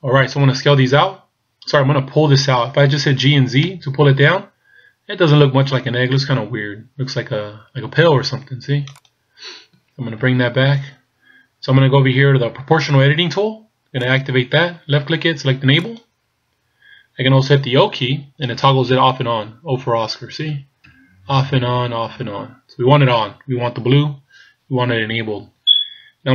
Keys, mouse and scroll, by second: 0.8-3.1 scroll down 1, 3.2 g, 10.5 ctrl+z, 14.1 click, 18.1-22.2 typing.